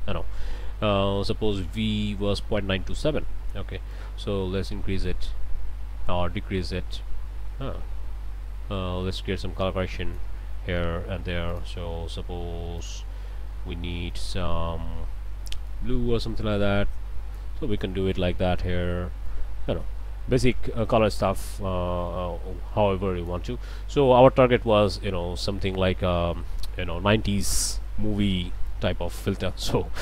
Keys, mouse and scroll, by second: 3.9-10.4 drag, 11.5 click, 12.8 click, 15.7-17.6 drag, 18.1 click, 19.2-23.5 drag, 24.1-25.1 scroll up 2, 24.7 click, 25.7 scroll down 2, 26.3 middle click, 27.0 scroll down 2, 27.4 middle click.